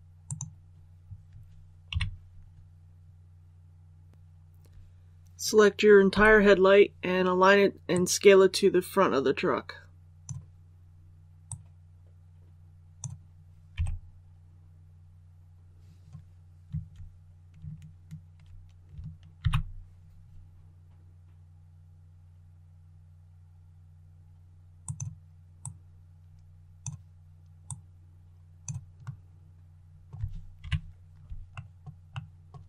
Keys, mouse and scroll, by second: 0.2 click, 1.8 KP_1, 4.1 click, 6.0 l, 7.8-13.3 drag, 13.6 s, 19.3 shift+y, 24.7-28.9 drag, 28.9-30.3 middle drag, 30.5 KP_3, 31.5 shift+middle click, 32.0 shift+middle click.